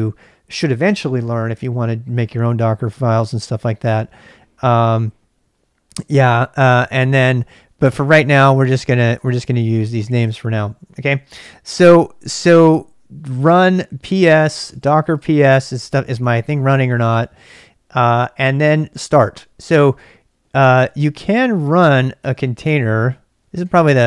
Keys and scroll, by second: 13.4 ctrl+c, 13.9-15.9 typing, 20.5 ctrl+[, 20.6-24.0 typing.